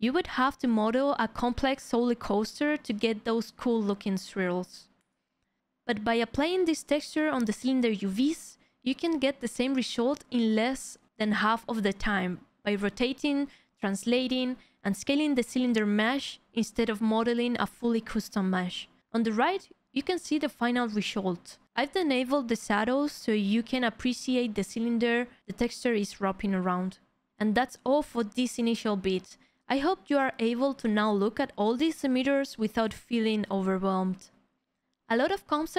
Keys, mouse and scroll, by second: 0.0 Delete, 0.1 alt+click, 0.5 2, 0.5 w, 0.6 click, 0.9 ctrl+\, 1.0 ctrl+BackSpace, 1.3 alt+click, 1.8 alt+click, 2.2 4, 2.5-4.3 alt+drag, 4.5 4.